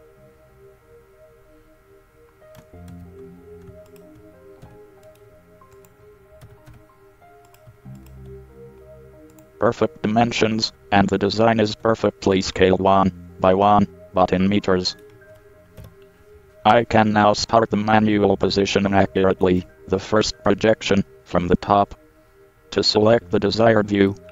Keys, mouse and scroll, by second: 3.1 ctrl+z, 4.1-6.0 drag, 4.9 e, 6.6 x, 11.0-13.7 middle drag, 11.9 Tab, 14.3 middle click, 16.0 KP_7, 16.8-18.0 middle drag, 16.8-17.6 scroll down 1, 18.1 z, 18.4-20.5 scroll up 1, 19.9 z.